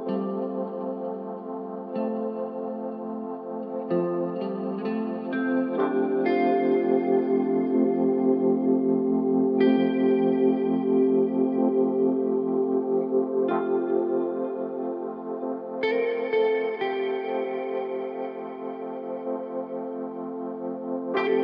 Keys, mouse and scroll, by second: 1.2-3.1 drag, 11.2-13.1 drag, 15.4-17.2 drag, 17.9-19.8 middle drag.